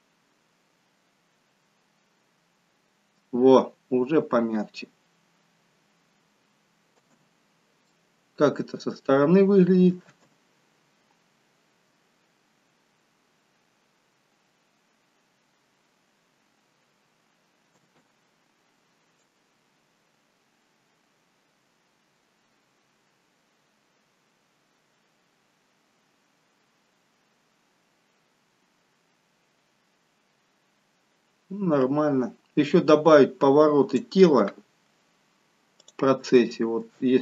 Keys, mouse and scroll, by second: 7.2 space, 8.0 middle click, 10.8 space, 14.9-15.9 scroll up 2, 17.9 space, 19.4 click, 34.5-35.7 scroll up 2, 35.9 click, 36.5 shift+middle click, 37.1-37.2 scroll up 4.